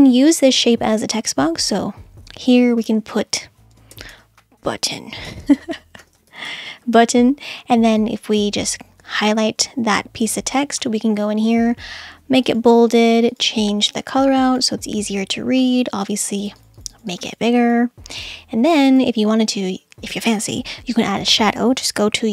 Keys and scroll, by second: 4.0 shift+b, 4.9 Caps_Lock, 5.3-7.0 typing, 9.7 super+Caps_Lock.